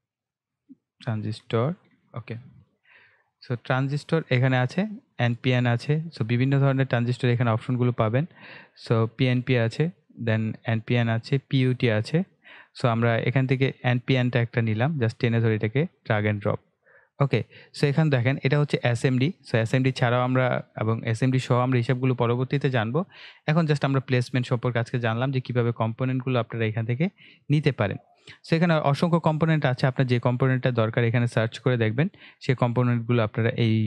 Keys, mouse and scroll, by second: 0.2-2.4 typing, 5.0 click, 6.0-7.8 scroll down 1, 7.9-9.2 scroll up 1, 9.3 click, 13.2 click, 18.4-19.3 scroll down 1, 19.4 ctrl+scroll up 1, 20.6 click, 24.1 scroll down 1, 24.7-25.4 scroll up 1, 25.4 ctrl+scroll down 1, 26.7 click, 29.1-29.6 scroll down 1, 30.7-33.4 scroll up 1.